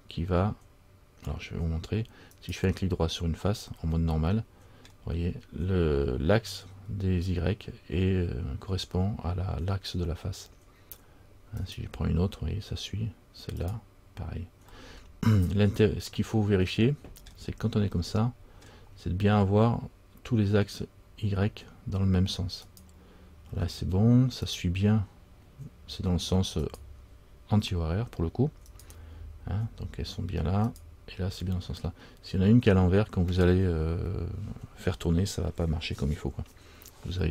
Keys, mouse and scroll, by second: 2.5 right click, 3.9 scroll up 1, 4.1 middle click, 5.1-7.1 scroll down 1, 11.8 right click, 14.9 right click, 14.9 scroll up 1, 15.0 middle click, 15.4-16.2 scroll down 2, 16.3 middle click, 17.5-18.1 scroll down 2, 18.2 middle click, 18.8-19.3 scroll down 1, 22.8 right click, 24.6 right click, 28.9 right click, 30.9 right click.